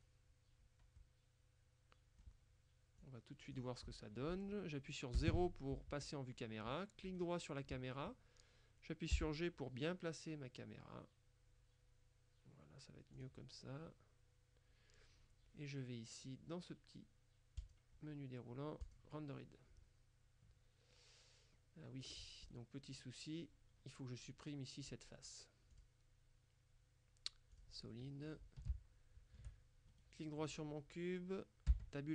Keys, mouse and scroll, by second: 1.1-2.8 middle drag, 3.1 click, 5.3 KP_0, 7.1 right click, 9.2 g, 13.2 click, 17.7 click, 18.9 click, 19.5-20.2 scroll up 1, 21.0-21.5 scroll up 1, 21.5-22.6 scroll down 2, 25.8 click, 27.6 click, 28.0 middle click, 28.7 shift+middle click, 30.0 shift+right click, 31.7 Tab.